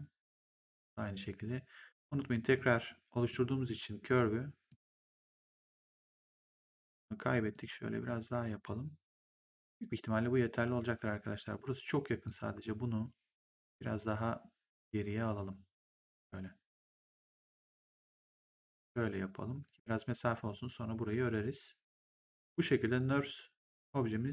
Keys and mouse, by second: 0.5 click, 2.4 click, 4.0 click, 5.5 click, 7.3 click, 12.2 click, 14.6 click, 21.8 right click, 23.0 click.